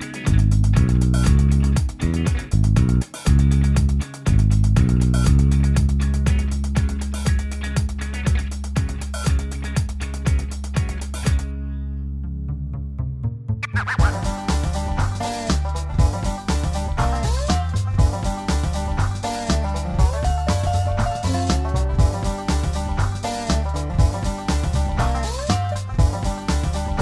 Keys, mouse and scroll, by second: 1.5 u, 5.6 u, 11.9 0, 11.9 F12, 12.8 0.